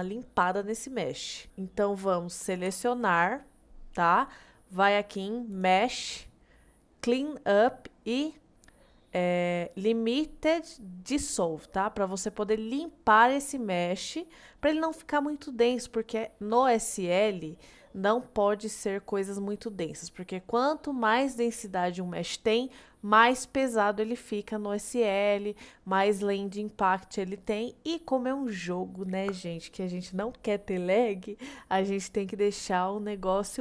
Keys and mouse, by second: 1.3 middle click, 2.7 a, 5.6-33.6 drag.